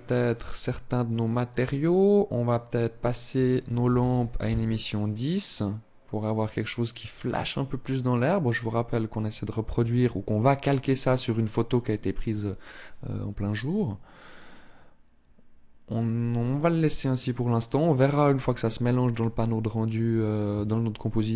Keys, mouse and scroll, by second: 16.1 click, 19.5-19.9 scroll up 1, 20.4 shift+middle click.